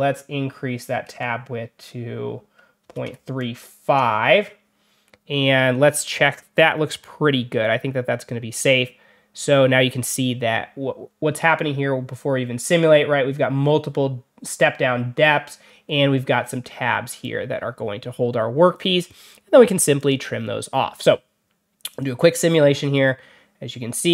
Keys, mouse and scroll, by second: 19.9 click, 21.8 click.